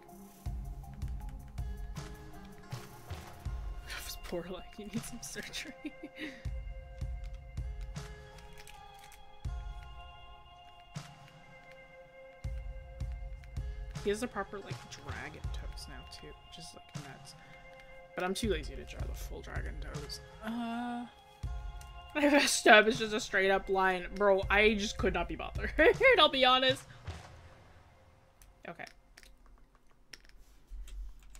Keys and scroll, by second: 4.2 scroll, 4.8 scroll up 1, 18.6 scroll down 1, 22.0-23.6 scroll, 23.6 scroll up 1, 24.0 scroll.